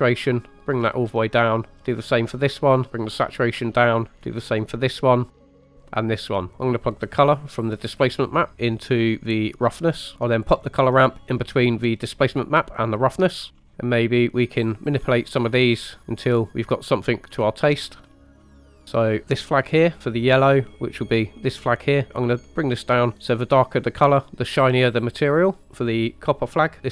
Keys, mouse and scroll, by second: 1.8 click, 2.3 click, 4.1 click, 4.8 click, 5.8-6.2 drag, 6.4 click, 6.5 right click, 6.5 middle click, 6.5 scroll down 1, 7.4 click, 8.0-9.8 drag, 10.1 right click, 10.5-12.9 drag, 12.9-13.9 typing, 13.5 scroll up 5, 13.7 click, 14.6 click, 16.0 click, 16.7 click, 18.2 click, 18.7 middle click, 18.8 scroll down 1, 21.5 click, 25.9 click.